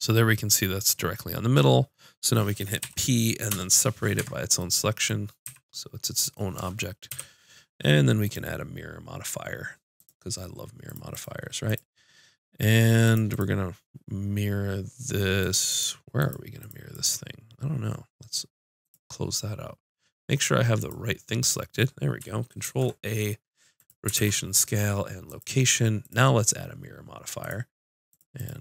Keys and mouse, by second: 2.8 p, 4.2 Tab, 5.4 z, 7.1 KP_5, 8.2-10.0 drag, 10.8-16.6 drag, 16.6-18.7 drag, 18.8 click, 19.3 middle click, 19.8 click, 20.3 middle click, 20.8-22.5 drag, 22.6 ctrl+a, 24.1 ctrl+a, 27.8-28.6 drag.